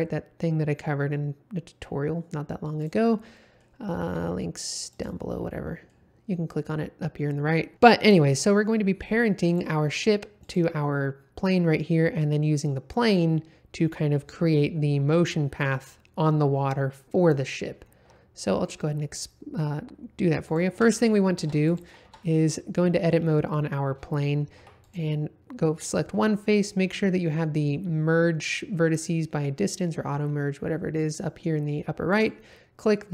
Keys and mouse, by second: 3.3 middle drag, 3.9 g, 4.0 z, 4.9 click, 5.5 middle click, 7.8 shift+middle drag, 8.8 middle click, 9.5 click, 10.4 click, 20.4 click, 20.8 Tab, 21.4 Tab, 22.0 Tab, 22.2 middle click, 24.5 2, 32.1 click.